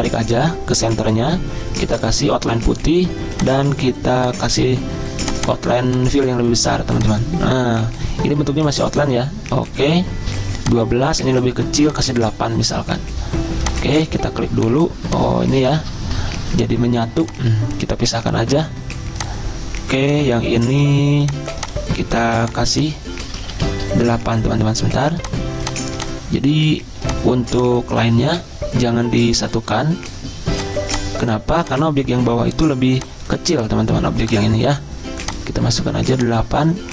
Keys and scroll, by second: 15.5 ctrl+z, 23.5 ctrl+z.